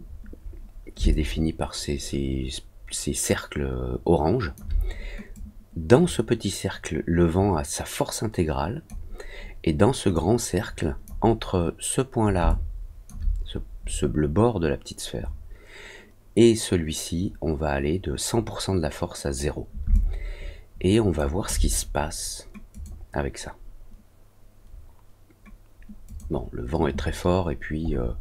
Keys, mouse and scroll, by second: 1.1-4.5 alt+drag, 5.3-8.8 drag, 10.1 click, 12.4 alt+click, 19.9-21.1 alt+drag, 22.7 click, 26.0 click, 27.8 middle click, 28.1 middle click.